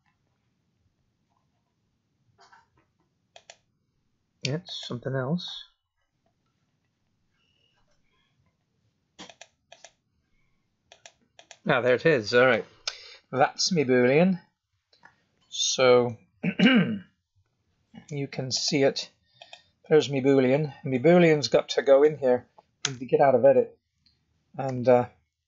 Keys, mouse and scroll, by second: 3.3 click, 4.6 click, 9.2 click, 9.6 click, 10.8 click, 11.3 click, 12.4 middle click, 14.0 scroll up 2, 14.5-15.5 scroll down 1, 15.5-17.0 scroll down 1, 17.4 z, 19.4 click, 19.8 middle click, 21.1 g, 21.8 click, 22.8 Tab, 23.4 click, 24.6 g.